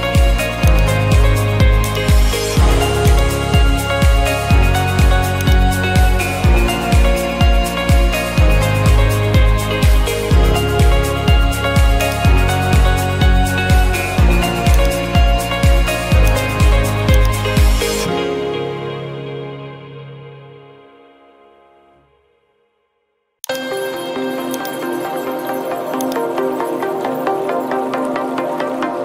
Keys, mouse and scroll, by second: 0.8 click, 5.6 click, 6.8-8.4 typing, 8.4 Return, 9.9 middle click, 10.8 middle click, 10.8 middle click, 12.1 click, 12.9 middle click, 13.0 middle click, 14.8 click, 16.0 click, 16.6-17.4 drag, 19.6-21.3 typing, 21.8 Return, 22.8 Return, 23.6-25.7 drag, 26.2 click, 27.6-29.0 typing.